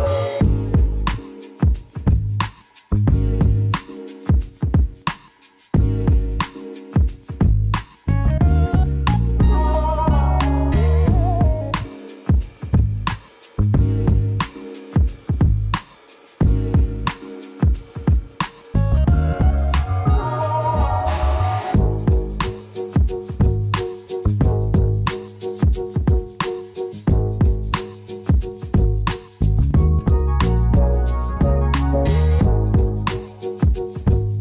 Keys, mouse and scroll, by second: 0.3 click, 0.9 s, 3.4 click, 3.8 scroll down 1, 3.9-5.1 middle drag, 4.2 Tab, 4.4 scroll up 1, 5.1 click, 5.4 middle click, 5.7-6.1 scroll up 2, 6.1 click, 12.1-12.6 scroll up 2, 12.6 KP_0, 13.0 scroll up 2, 13.3-19.3 shift+middle drag, 13.6-15.2 scroll up 2, 15.2-15.6 scroll up 1, 19.3-32.6 drag, 32.6 scroll up 1.